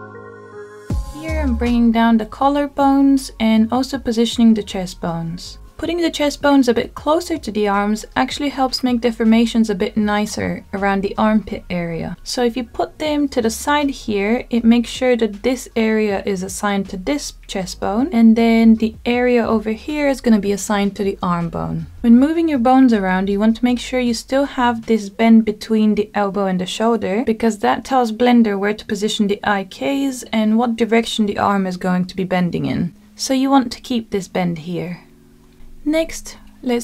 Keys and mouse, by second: 0.5 click, 2.6 click, 3.9 g, 6.3 click, 7.1 click, 8.4-9.2 drag, 9.6 g, 13.7 click, 14.8 g, 15.2 y, 17.2 click, 17.8-19.9 middle drag, 20.4-21.4 middle drag, 22.1-22.8 middle drag, 28.6-31.0 middle drag, 35.4 shift+middle click.